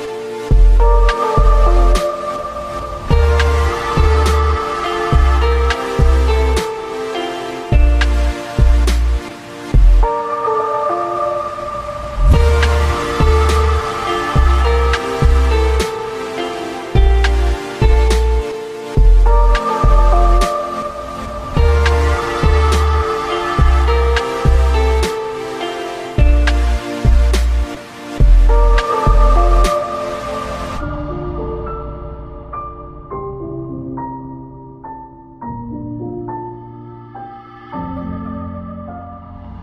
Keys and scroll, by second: 18.2 ctrl+shift+q, 24.4 ctrl+q, 29.3 ctrl+shift+q.